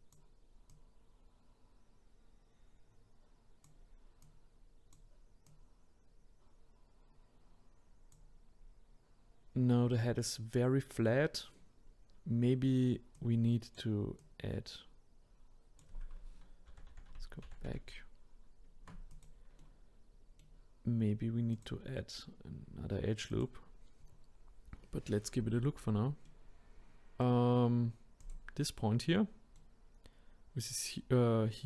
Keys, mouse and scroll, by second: 0.7 click, 4.2-5.5 drag, 8.6-9.1 scroll down 1, 13.1-16.7 drag, 16.7 ctrl+z, 16.9 ctrl+z, 17.1 ctrl+z, 17.4 ctrl+z, 17.7 ctrl+z, 19.1 click, 19.6-21.5 middle drag, 21.5 click, 23.3 click, 24.2 scroll up 2, 26.2-28.2 middle drag, 28.2 click, 28.8-31.6 middle drag.